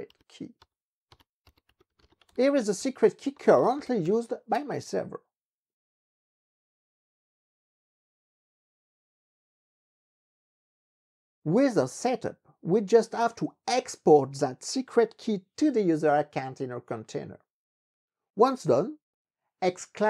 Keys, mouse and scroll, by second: 0.2 ctrl+d, 0.7 ctrl+d, 1.2 ctrl+d, 1.3-4.7 typing.